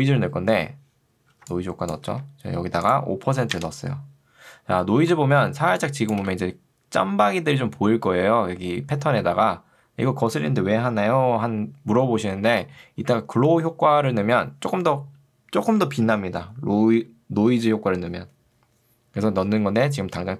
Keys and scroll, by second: 1.4 ctrl+2, 2.2 Escape, 3.4 5, 3.6 Return, 6.2 space.